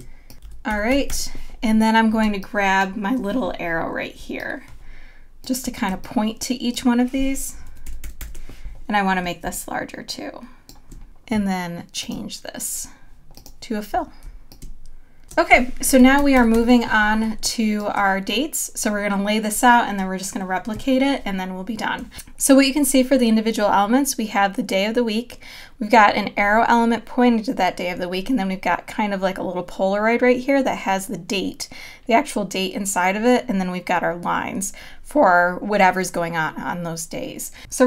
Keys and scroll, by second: 1.4 super+-, 2.2 space, 5.9 space, 8.7 super+=, 15.2 space, 16.4 super+-, 17.2 space.